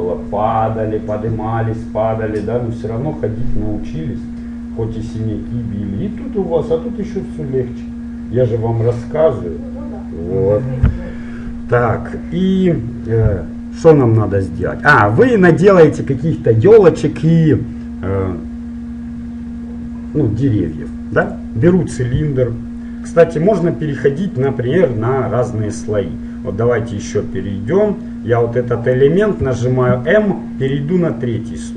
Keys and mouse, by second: 29.6 m.